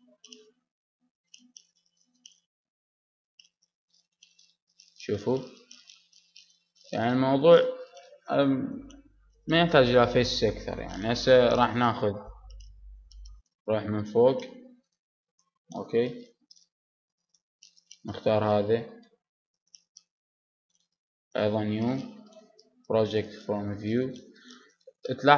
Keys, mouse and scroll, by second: 0.1 middle click, 0.8 middle click, 1.7 middle click, 2.6-3.6 middle drag, 4.8 middle click, 5.8-15.1 middle drag, 12.6 Tab, 15.1 KP_7, 17.0 z, 17.5 z, 19.6 b, 20.6-23.2 middle drag, 23.2 u.